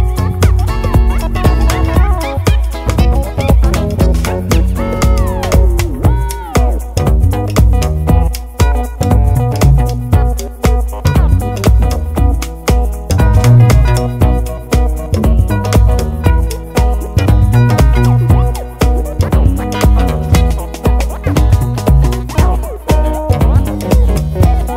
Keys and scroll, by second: 7.4 super+c, 7.6 super+v.